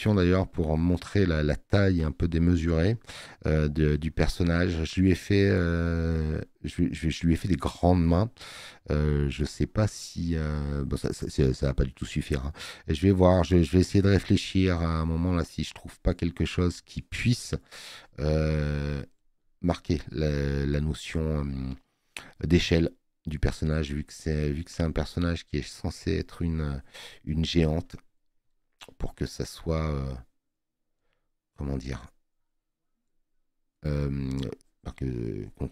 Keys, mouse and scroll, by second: 9.9 space.